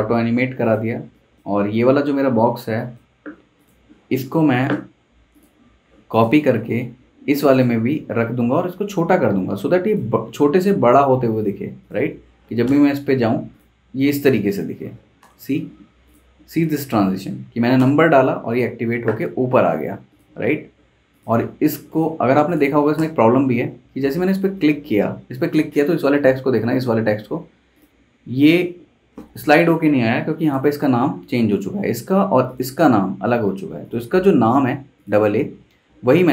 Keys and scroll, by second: 1.6 super+z, 3.3 super+z, 6.5 super+c, 8.0 super+v, 12.7 super+Return, 15.2 super+Return, 17.7 super+Return, 22.9 super+Return, 35.9 super+c.